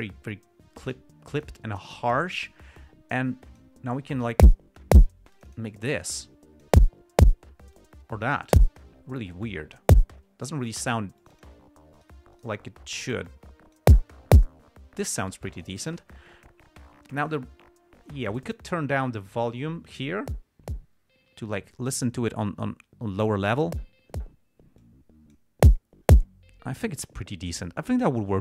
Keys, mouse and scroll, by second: 2.5-4.1 drag, 5.7-7.1 drag, 8.1-8.8 drag, 9.6-10.3 drag, 11.5 click, 12.3 right click, 12.7 right click, 13.6-14.3 drag, 18.7 click, 25.1-25.8 drag.